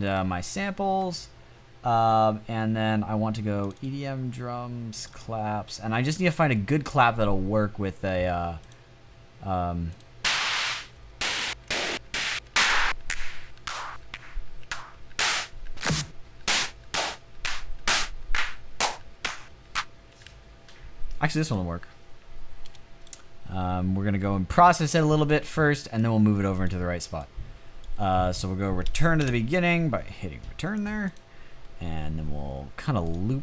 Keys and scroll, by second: 10.4 Up, 10.9 Up, 11.3 Up, 11.7 Up, 12.8 Up, 13.9 Up, 14.9 Up, 16.1 Up, 16.6 Up, 17.5 Up, 18.4 Up, 18.9 Up, 19.7 Down, 28.6 Return.